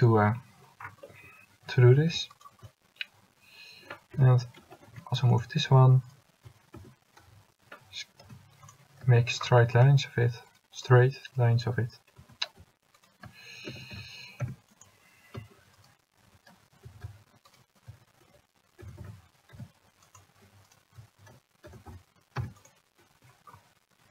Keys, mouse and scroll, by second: 4.2 l, 5.1 g, 6.9 s, 12.5 s, 13.8 s, 17.1 s, 18.9 s, 21.8 s.